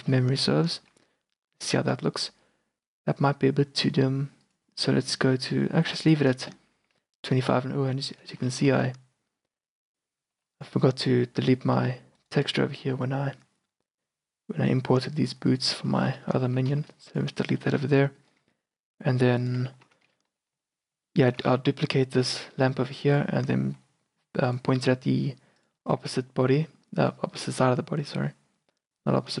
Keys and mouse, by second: 1.6 middle click, 4.5-6.4 drag, 6.9 z, 7.9 z, 8.8 z, 10.4 shift+b, 11.9 z, 13.5 middle click, 15.6-16.9 drag, 16.9 shift+b, 17.9 a, 18.2 middle click, 18.5 q, 19.5-21.4 drag, 20.3 q, 21.5 shift+d, 22.6-23.2 drag, 23.5 r, 24.7 g, 26.0 q, 27.2-29.0 drag, 28.1 r.